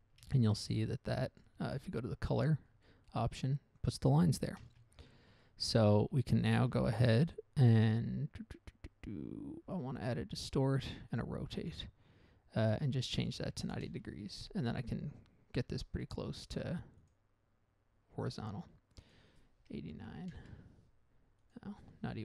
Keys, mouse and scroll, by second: 0.7 ctrl+shift+click, 1.2 click, 1.7 click.